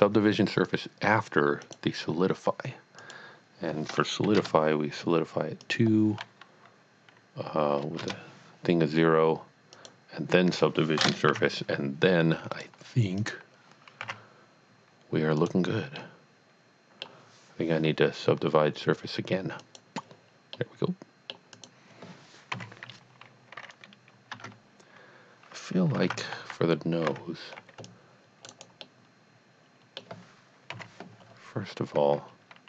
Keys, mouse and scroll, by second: 1.6 click, 3.0 click, 4.2 KP_2, 4.4 KP_Enter, 5.7 click, 7.8 KP_0, 8.0 KP_Enter, 9.8 click, 11.0 space, 11.3 z, 12.5 click, 13.2 click, 14.0 z, 15.4 click, 16.2 middle click, 18.5-19.4 scroll down 1, 19.6 click, 20.5 middle click, 21.5 click, 22.6 KP_3, 24.3 Tab, 26.2 a, 26.5 c, 27.1 c, 27.5 scroll down 1, 27.9 click, 28.5 right click, 28.8 middle click, 30.7 KP_3, 32.3-32.6 scroll up 1.